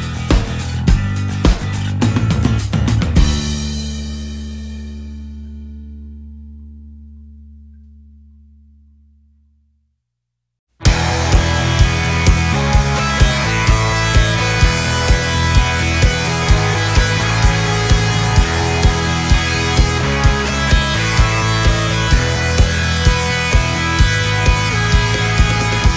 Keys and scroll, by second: 2.7 ctrl+z, 4.0 ctrl+z, 10.0 ctrl+z.